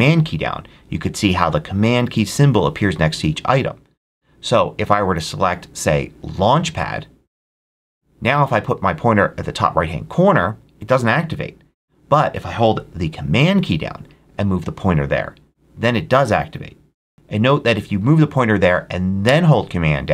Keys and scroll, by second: 17.1 Escape.